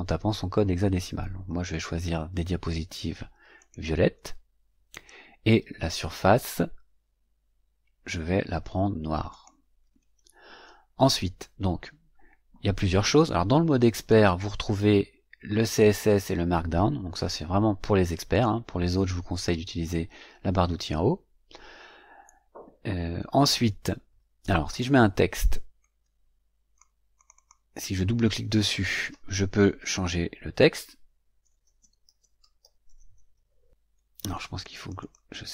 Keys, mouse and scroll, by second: 3.5 click, 5.8 click, 9.2 click, 13.9 click, 18.3 click, 24.6 click, 25.7 click, 27.1 click, 31.1-33.8 typing, 34.3 click.